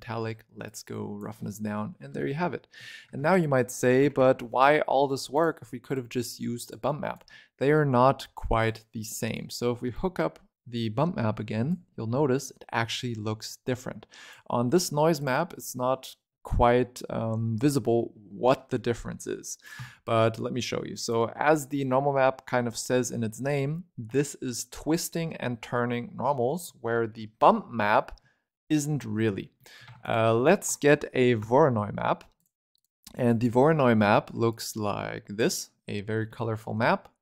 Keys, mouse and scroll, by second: 1.5-2.1 scroll up 2, 2.1 shift+middle click, 2.6 scroll down 2, 2.7 shift+middle click, 2.9 shift+a, 6.6 click, 8.6 click, 9.8 click, 13.3 click, 15.1 click, 18.4-19.5 middle drag, 19.5 click, 19.7 x, 20.9 click, 21.1-21.5 scroll up 6, 21.5 middle click, 26.0 scroll down 2, 26.2 middle click, 26.6-29.0 scroll up 13, 26.8 middle click, 29.0-29.5 scroll down 13, 29.5 middle click, 29.7 shift+a, 33.0 scroll down 4, 33.1-34.4 middle drag, 34.4 click.